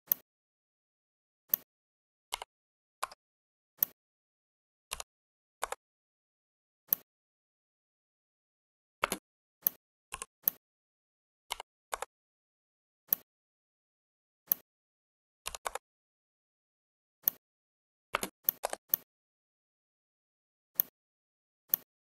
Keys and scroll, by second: 2.9 Escape, 4.8 2, 5.5 Return, 8.9 space, 11.4 4, 11.8 Return, 15.3 2, 15.6 Return.